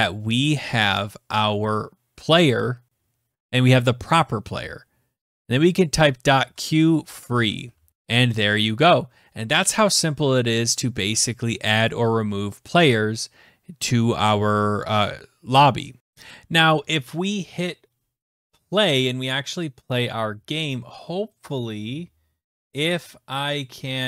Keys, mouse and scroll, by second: 3.4 Right, 5.2-7.2 typing, 7.5 ctrl+s, 16.0 click.